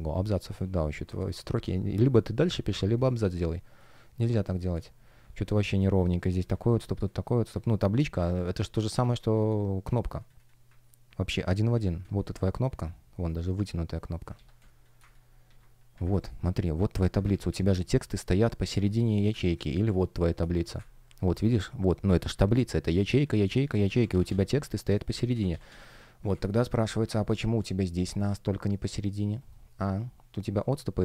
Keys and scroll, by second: 0.2 space, 1.0 Escape, 1.5 shift+p, 3.4 space, 6.7 space, 8.9 space, 11.6 super+c, 11.9 space, 14.2 super+c, 14.5 space, 15.4 super+v, 17.2 super+d, 18.6 space, 19.5 space, 20.7 super+space, 21.1 shift+p, 23.8 super+z, 25.2 super+z, 26.2 space, 28.5 shift+o, 28.8 shift+g, 29.6 shift+o.